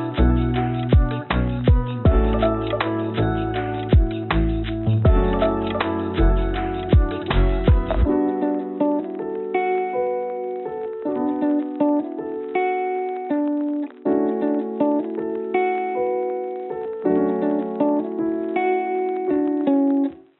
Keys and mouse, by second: 4.6 ctrl+r, 12.8-15.9 drag, 18.6 3, 20.0 click.